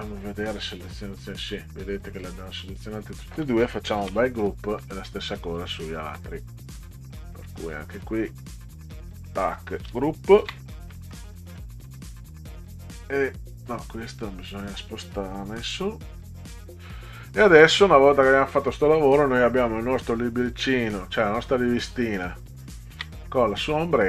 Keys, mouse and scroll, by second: 0.4 click, 2.1 click, 4.0 ctrl+g, 4.8 middle click, 6.8 click, 8.0 click, 10.4 ctrl+g, 10.6-10.9 drag, 10.9 middle click, 11.3 click, 12.1-13.7 drag, 14.1 click, 15.5 Up, 17.7-18.8 drag, 22.9 ctrl+g, 23.9 click.